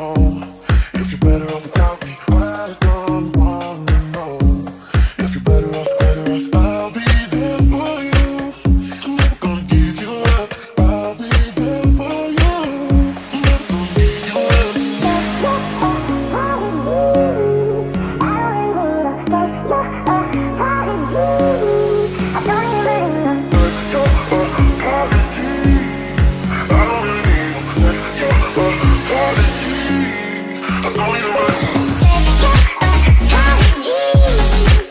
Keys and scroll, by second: 3.7-5.1 typing, 8.6 Escape, 10.6-16.6 typing, 19.6 d, 20.7 d, 20.9 d, 27.3 Escape, 27.4-29.9 typing, 34.7 Escape.